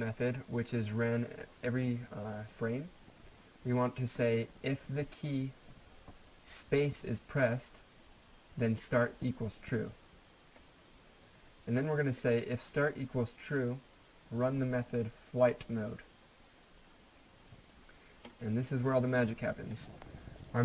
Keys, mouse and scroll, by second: 7.8-8.5 scroll down 1, 11.1-12.9 scroll down 1, 17.1 scroll down 1.